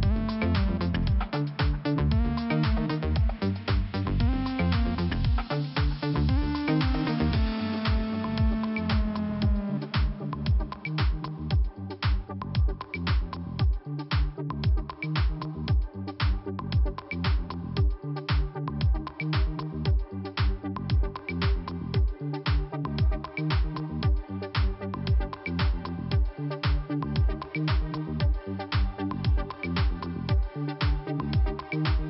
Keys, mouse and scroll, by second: 2.5-3.0 scroll up 2, 4.6 click, 6.4 click, 6.8 click, 6.9 double click, 7.5 double click, 9.1 click, 9.2 click, 9.5 click, 11.0 click, 12.9 click, 13.8 click, 14.9 click, 16.9 click, 17.0 click, 17.5 click, 18.7 click, 20.0 click, 25.7 click, 26.9 click, 27.0 click, 27.4 click, 29.0 click, 29.1 click, 29.9 click, 31.1 click, 31.6 click.